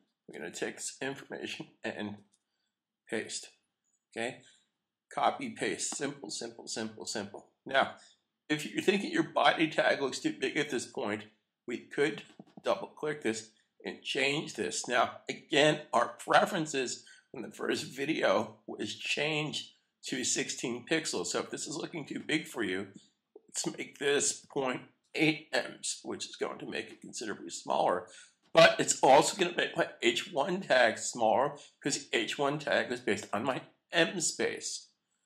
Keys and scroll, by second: 0.3 super+a, 2.1 super+v, 33.2 super+s.